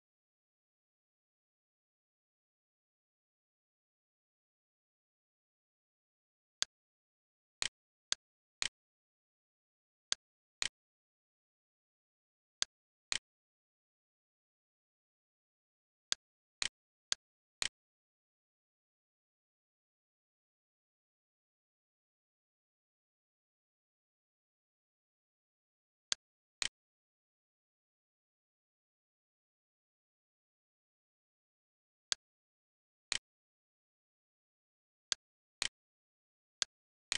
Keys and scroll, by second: 0.4 3, 2.0 -, 4.0 8, 4.9 Return, 9.0 ctrl+c, 13.0 ctrl+v, 14.7 Return, 24.5 c, 28.5-30.2 typing, 34.0 l.